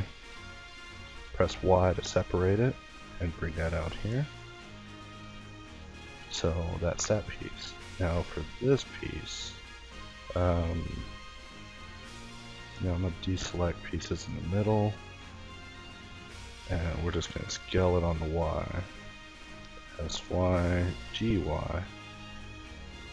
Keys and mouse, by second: 0.4 middle click, 0.8 y, 1.8-3.7 middle drag, 5.1 Tab, 6.1 Tab, 8.3 a, 9.2 l, 10.2 l, 11.6-12.9 middle drag, 13.1 ctrl+i, 13.5 ctrl+z, 13.9 ctrl+i, 14.6 ctrl+i, 15.4 s, 19.8 g, 21.4 a, 22.1 l, 23.0 l.